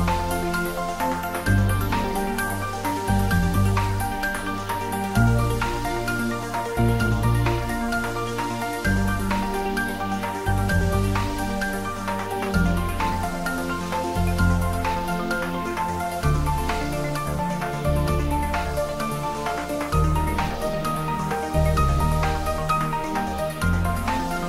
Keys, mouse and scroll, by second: 0.5 click, 0.6 Tab, 0.9-2.5 middle drag, 2.8 Tab, 3.3 ctrl+r, 4.1 click, 4.7 Tab, 5.2-6.5 middle drag, 6.5 Tab, 8.0 ctrl+r, 8.5 click, 8.9 ctrl+z, 9.9 click, 11.1 middle click, 11.8 Tab, 12.0 middle click, 12.9 right click, 13.4 click, 13.7-15.5 middle drag, 15.5 Tab, 16.0-17.6 middle drag, 18.0 middle click, 18.6 Tab, 18.7-20.3 middle drag, 20.3 middle click, 21.4-23.5 shift+middle drag, 23.8 middle click.